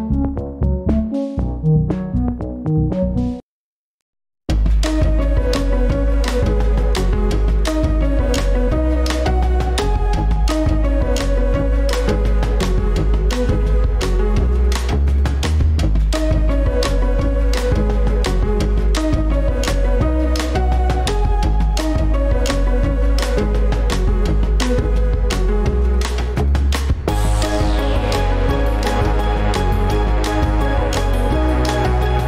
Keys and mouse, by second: 5.4 Tab, 7.0 click.